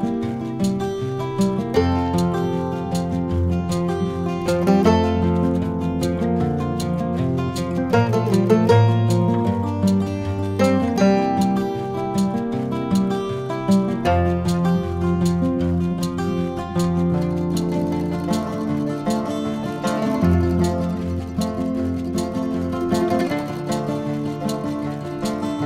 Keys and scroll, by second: 20.1 ctrl+c, 20.3 ctrl+f, 22.4 ctrl+KP_Add, 23.0 ctrl++.